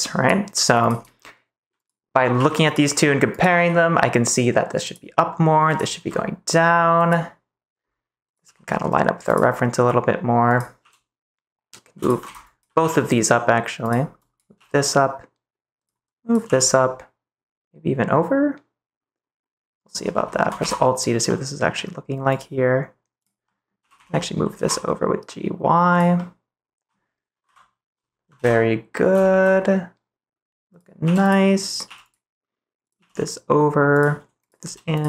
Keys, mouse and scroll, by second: 2.3 g, 3.3 click, 3.5 g, 4.8 click, 5.9 g, 6.9 click, 8.4 g, 9.2 click, 10.4 click, 10.7 g, 11.9 click, 12.2 ctrl+z, 12.4 click, 12.7 g, 13.8 click, 14.2 click, 14.5 g, 16.1 click, 16.4 g, 19.7 click, 20.5 alt+z, 21.2 middle click, 22.3 click, 23.1 click, 23.4 middle click, 23.7 g, 23.9 x, 24.5 y, 25.9 click, 26.1 middle click, 26.2 click, 27.4 KP_3, 28.3 ctrl+s, 29.2 shift+middle click, 31.0 g, 31.2 click, 31.7 click, 31.8 g, 32.9 g, 33.9 click, 34.6 g, 34.9 click.